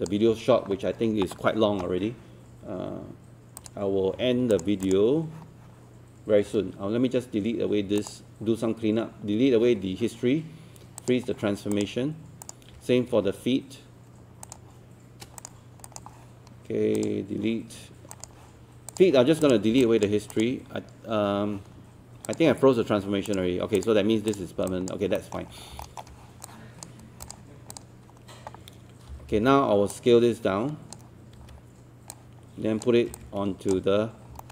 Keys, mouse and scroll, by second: 3.6 click, 14.4 shift+click, 15.4 click, 19.8 alt+click, 24.7 alt+click, 25.2 alt+middle click, 25.6 scroll down 1, 25.8 alt+middle click, 26.5 click, 29.1 typing, 29.9-31.2 drag, 31.4 w, 32.1-34.2 drag, 34.4 alt+middle click.